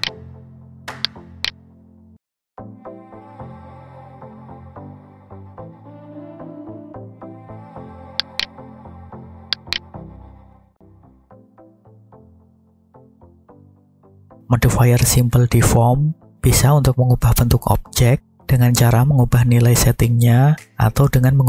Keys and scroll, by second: 3.6 Tab, 5.0 g, 6.2 x, 10.5 F9.